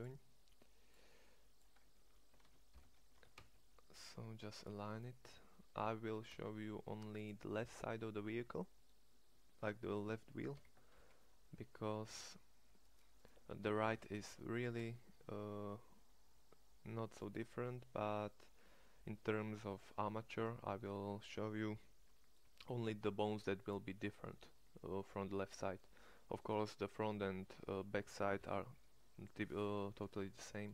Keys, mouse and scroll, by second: 2.8 ctrl+l, 3.1 g, 6.1 g, 10.5 a, 10.9 c, 13.9 ctrl+l, 14.6 g, 20.5 Tab.